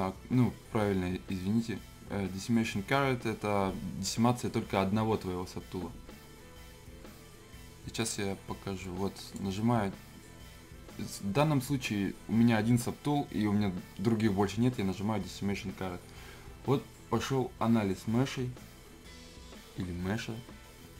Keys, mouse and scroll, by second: 8.8-11.8 drag.